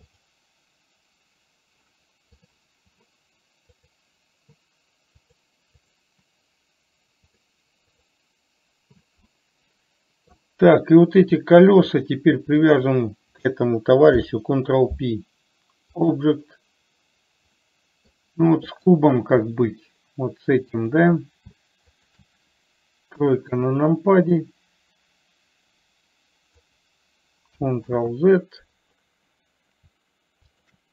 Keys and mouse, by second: 0.5 click, 4.1 click, 5.6 click, 6.1 click, 7.6 click, 9.6-10.7 middle drag, 13.0 shift+click, 14.5 ctrl+p, 18.0 middle click, 19.1 click, 21.1 shift+click, 23.6 KP_3, 24.9-27.1 drag, 28.2 ctrl+z.